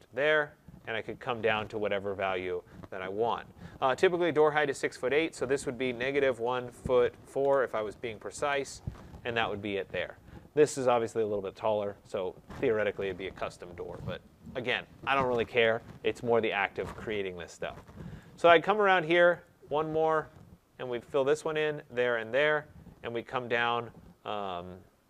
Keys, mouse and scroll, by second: 5.9-8.4 typing, 10.8 click, 14.3 right click, 14.7-15.8 scroll, 18.0 right click, 19.3 click, 19.8-21.3 scroll, 21.3 click, 22.2 click.